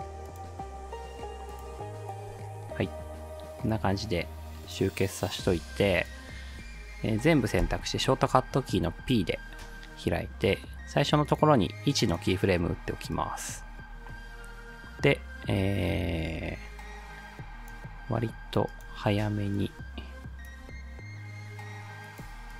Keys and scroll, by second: 7.6 p.